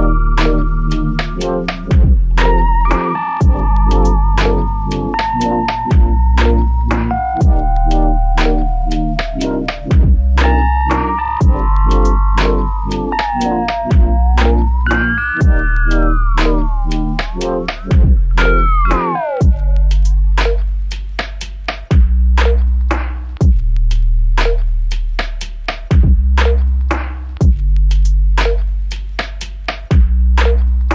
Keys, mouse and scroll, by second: 6.7 r, 19.9 ctrl+scroll down 1, 22.8 alt+click, 29.7 typing.